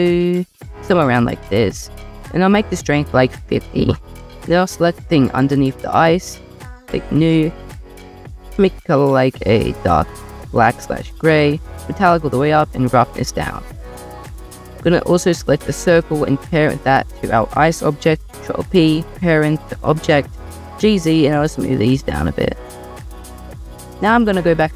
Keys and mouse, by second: 2.0-3.4 drag, 10.7 click, 12.2-13.2 drag, 13.4 click, 13.7 click, 16.6 shift+click, 18.0 ctrl+p, 19.5 click, 20.6 g, 20.8 z.